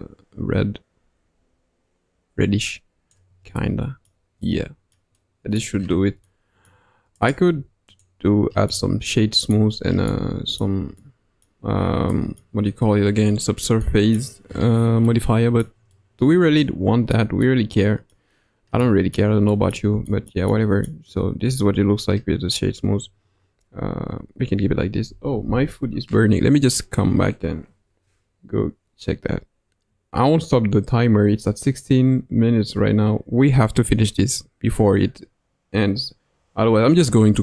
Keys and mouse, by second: 3.6 middle click, 4.4 middle click, 5.2-5.6 middle drag, 6.2-6.7 middle drag, 7.2 right click, 8.7-9.5 middle drag, 10.1-10.6 middle drag, 11.0-11.5 middle drag, 12.1-12.4 middle drag, 13.8 middle click, 15.0-15.6 middle drag, 15.9-18.1 middle drag, 18.8-19.2 middle drag, 19.4 middle drag, 20.0 shift+middle drag, 20.5-20.9 middle drag.